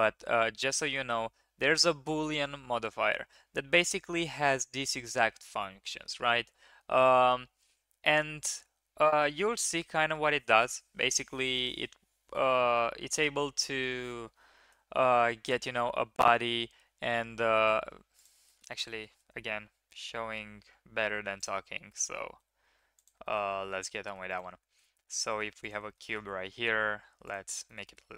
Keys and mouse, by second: 18.4 shift+drag, 18.7 drag, 19.1 shift+a, 22.2 g, 23.2 shift+middle drag, 24.3 shift+middle click, 24.8 shift+a, 25.9 drag, 26.5 s, 27.6 shift+click.